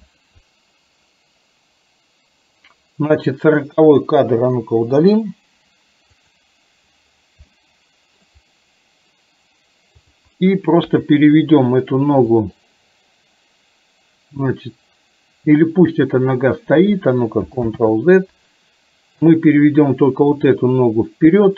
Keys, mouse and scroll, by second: 4.6 Delete, 6.4 click, 7.6-8.1 middle drag, 10.9 KP_3, 12.3 click, 12.6-16.1 drag, 17.8 ctrl+z, 20.5-21.5 drag.